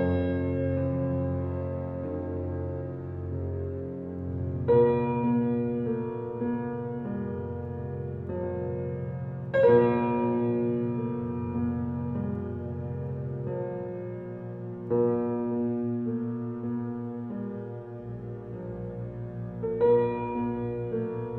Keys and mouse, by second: 0.1 alt+click, 1.0 alt+a, 1.0 typing, 1.4-3.3 ctrl+alt+drag, 2.2-2.9 typing, 3.2 ctrl+s, 3.7-7.3 ctrl+alt+drag, 8.7-10.1 alt+shift+drag, 10.6 ctrl+alt+click, 11.4-12.7 ctrl+alt+shift+drag, 11.6 typing, 12.8 3, 14.4-15.6 ctrl+alt+drag, 15.7 click, 16.9 ctrl+s.